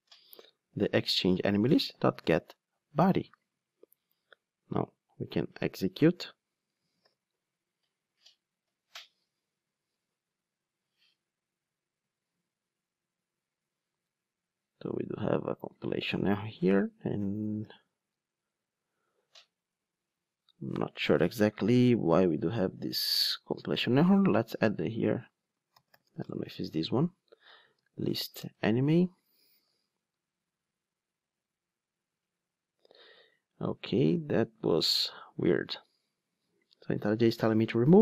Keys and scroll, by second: 1.2 Return, 7.0 ctrl+r, 17.5 ctrl+r, 28.4 Return, 29.8 ctrl+r.